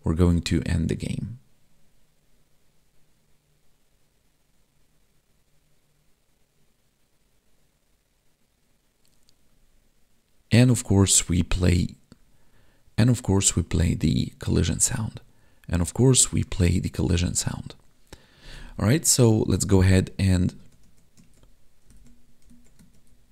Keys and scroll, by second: 19.7 Tab, 20.7 alt+Tab, 21.4 Tab, 22.6 alt+Tab.